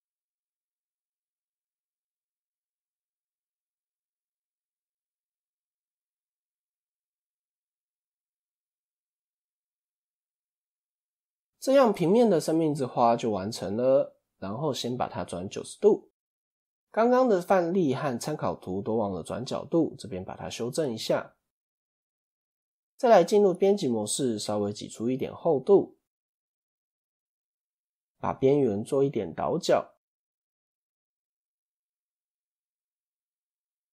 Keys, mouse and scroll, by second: 4.0-4.3 scroll down 4, 4.3-5.1 shift+middle drag, 5.1 1, 5.6 click, 5.9 click, 6.8 x, 8.4 click, 9.3 x, 10.2 Tab, 10.5 scroll up 1, 10.8 click, 14.4 click, 16.0 r, 17.4 scroll up 2, 18.6 click, 20.4 click, 22.6 click, 23.1 Tab, 23.5 KP_1, 23.9 a, 24.8 e, 26.6 click, 27.1 middle click, 27.3 2, 27.5-28.5 scroll up 2, 28.5 alt+click, 28.9-30.2 middle drag, 30.2 alt+shift+click, 30.6-32.0 middle drag, 32.0 alt+shift+click, 32.3-33.6 middle drag, 33.6 alt+shift+click.